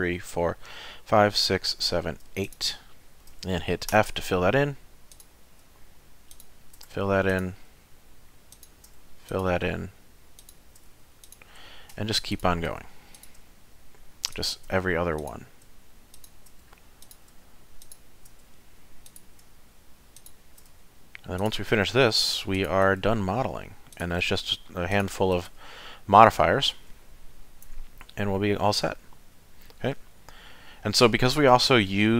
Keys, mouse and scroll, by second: 2.4 shift+click, 3.9 f, 5.1 click, 6.3 shift+click, 6.9 f, 7.3 click, 8.5 shift+click, 9.0 f, 9.3 click, 10.4 shift+click, 10.9 f, 11.2 click, 12.3 shift+click, 12.8 f, 13.2 click, 14.3 shift+click, 14.8 f, 15.2 click, 16.1 shift+click, 16.6 f, 17.0 click, 17.8 shift+click, 18.4 f, 19.1 click, 20.2 shift+click, 20.7 f, 21.4 click, 22.5 shift+click, 23.0 f, 23.9 click, 24.9 shift+click, 25.5 f, 26.3 middle click, 27.7 Tab, 28.0 middle click, 31.8 middle click.